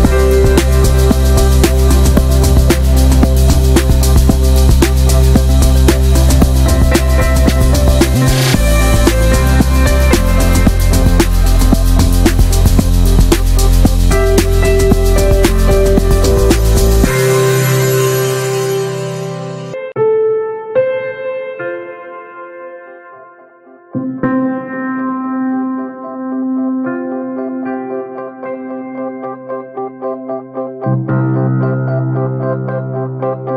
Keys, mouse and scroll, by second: 0.5 scroll down 1, 0.6 middle click, 0.9 Tab, 1.1 shift+middle click, 1.5 ctrl+r, 1.9 middle click, 2.0 scroll up 1, 2.1 shift+middle click, 2.4 ctrl+b, 4.5-5.7 alt+shift+drag, 5.7 ctrl+b, 7.3 shift+middle click, 8.0 e, 9.8 middle click, 10.2 alt+s, 12.5 middle click, 12.8 e, 14.5 Tab, 14.7 middle drag, 14.8-15.8 scroll up 5, 14.9 shift+middle click, 15.3 Tab, 15.5 shift+middle click, 15.8 shift+middle click, 16.6 2, 16.9 click, 17.6 middle click, 18.1 alt+shift+drag, 18.3-19.0 shift+middle drag, 19.0-19.5 alt+shift+drag, 19.5 ctrl+z, 19.7 alt+shift+click, 20.5 scroll down 1, 20.6 shift+middle click, 21.0 ctrl+b, 22.2 Tab, 22.4-23.3 scroll down 4, 22.5 shift+middle click, 23.0 alt+middle click, 23.3 shift+middle click, 23.5 shift+scroll up 1, 23.8 Tab, 23.9 middle drag, 24.2-24.7 shift+scroll up 2, 24.7 3, 24.8 click, 25.0 alt+middle click, 25.2 shift+middle drag, 25.5 s, 26.1 shift+middle click, 26.2 shift+scroll up 1, 26.4 s, 27.1 shift+middle click, 27.4 e, 28.4 shift+middle click, 28.6 e, 29.7 shift+middle click, 29.8 shift+scroll up 1, 30.0 e, 31.7 shift+middle click, 31.8-32.1 scroll up 2, 31.9 middle click, 32.1 shift+middle click, 32.4 alt+shift+click, 32.9 middle click, 33.2 scroll up 1, 33.4 s.